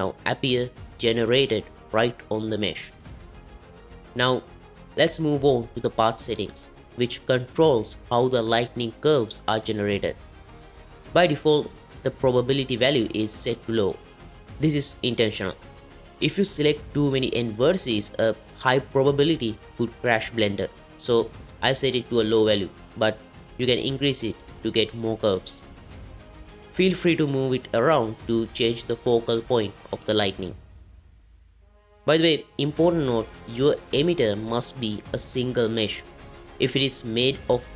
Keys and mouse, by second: 14.6-24.2 drag, 26.6 g.